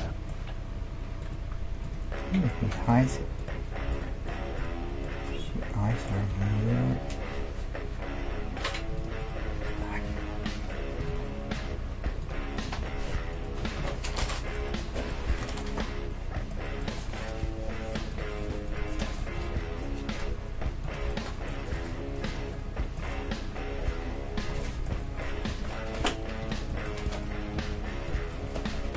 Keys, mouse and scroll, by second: 1.2 right click, 1.4 middle click, 1.6 right click, 2.3-4.5 middle drag, 4.5-5.9 right drag, 5.9-7.8 middle drag, 6.3 g, 9.2-14.1 right drag, 9.5 g, 10.1 g, 11.7 g, 12.8 g, 13.6 g, 14.1-18.6 middle drag, 18.1-20.5 right drag, 19.1-24.5 middle drag, 19.4 g, 21.8-23.9 right drag, 23.0 g, 24.8-26.9 middle drag, 25.5 g, 27.6 g, 28.3 right click, 28.5 right click, 28.8-28.9 middle drag.